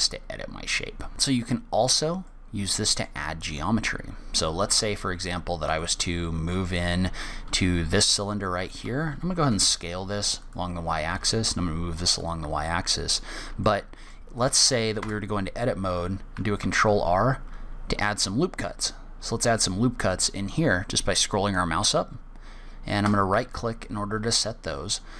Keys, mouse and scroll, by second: 1.1 shift+middle click, 1.1-1.4 scroll down 4, 1.7-2.2 scroll up 2, 2.6 middle click, 3.9 click, 5.0 Tab, 5.5-6.0 scroll up 4, 6.2 shift+middle click, 7.0 click, 10.0 s, 11.4 g, 13.0 middle click, 14.0 shift+middle click, 14.7 click, 15.4 Tab, 17.0 ctrl+r.